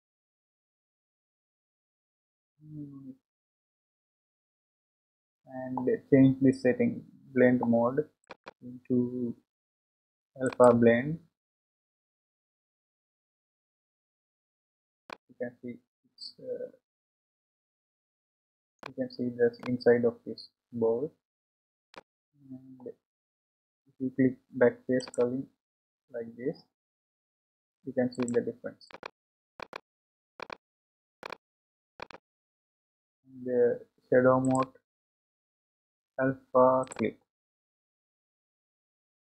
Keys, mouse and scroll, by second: 5.3-8.2 scroll down 4, 12.5 click, 14.6-14.9 scroll up 2, 15.2-18.3 middle drag, 19.7-22.8 middle drag, 25.0 click, 28.1 click, 29.0 click, 29.7 click, 30.4 click, 31.2 click, 32.1 click, 37.4 click.